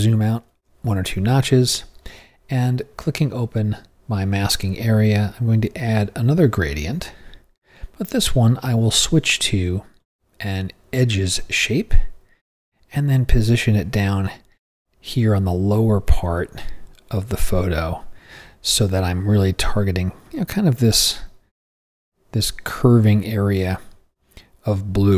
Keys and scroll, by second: 0.0 super+-.